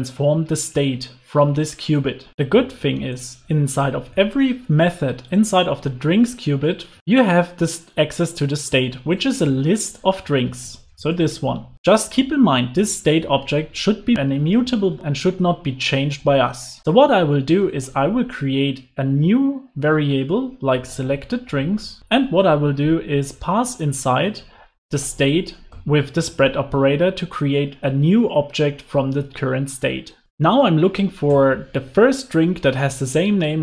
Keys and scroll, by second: 16.1 alt+shift+Left, 30.2 alt+BackSpace.